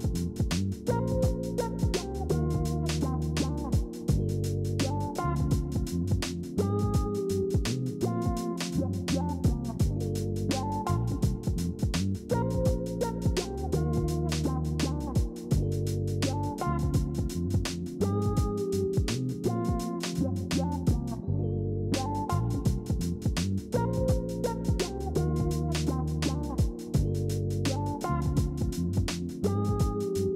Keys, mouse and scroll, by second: 10.7 ctrl+c, 10.9 ctrl+f, 21.2 ctrl+alt+z, 27.1 alt+Tab, 27.4 ctrl+click, 27.5 ctrl+z, 29.1 ctrl+c, 29.3 ctrl+f, 30.2 ctrl+z.